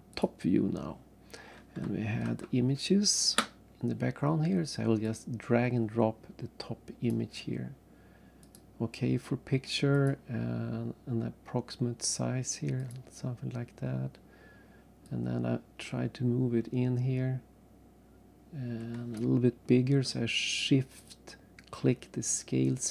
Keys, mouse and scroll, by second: 0.1 click, 2.2 alt+Tab, 5.0 click, 8.5 click, 10.0 click, 12.8 click, 13.7-14.1 scroll down 1, 14.4 scroll up 2, 15.0 click, 21.1 shift+click.